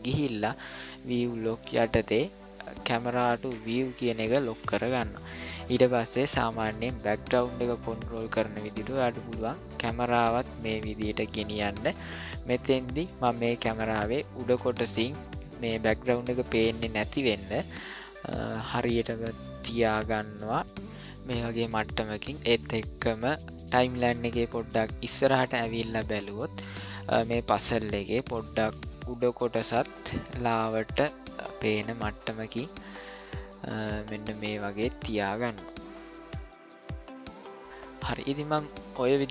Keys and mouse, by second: 3.6 click, 6.7-8.3 middle drag, 8.8-9.6 shift+middle drag, 9.9-12.0 middle drag, 12.4 shift+middle click, 17.7-21.3 middle drag, 21.7-23.5 ctrl+middle drag, 25.2-27.6 drag, 29.0 click, 29.6 middle click, 30.4-33.4 shift+middle drag, 33.8-35.3 ctrl+middle drag.